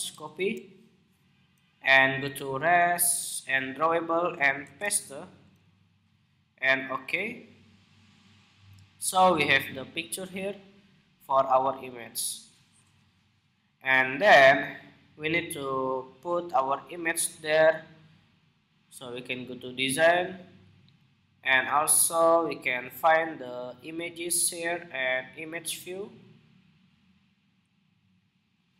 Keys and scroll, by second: 0.0 super+c, 4.3 super+v.